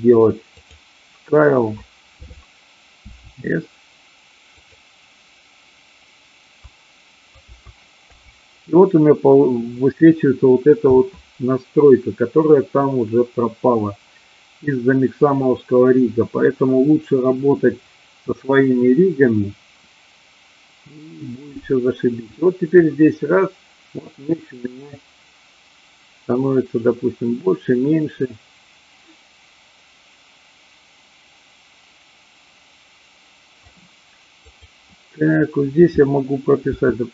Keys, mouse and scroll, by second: 0.6 click, 7.3 a, 7.9 i, 22.8 click, 34.3 click.